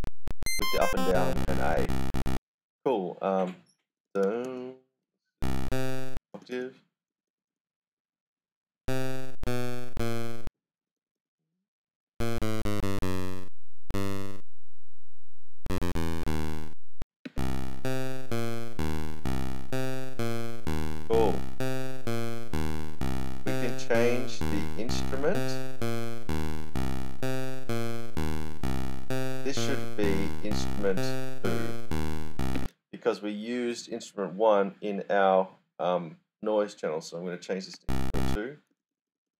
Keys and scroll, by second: 0.0-0.2 typing, 3.7-13.8 typing, 15.3-16.1 typing, 17.2 space, 20.2-23.3 typing, 32.5 space, 37.4-39.3 typing.